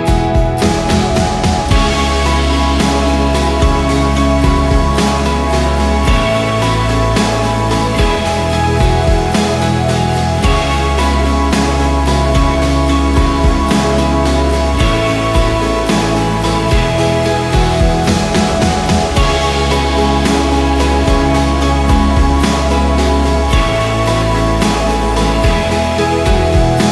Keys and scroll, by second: 21.7 ctrl+8.